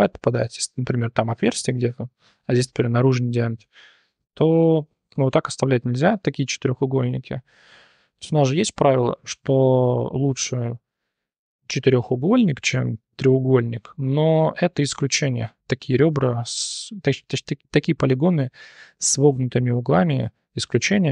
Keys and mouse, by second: 0.0 1, 0.3 click, 4.2 1, 4.4 click, 6.5 shift+click, 19.3 drag, 20.4-20.8 drag.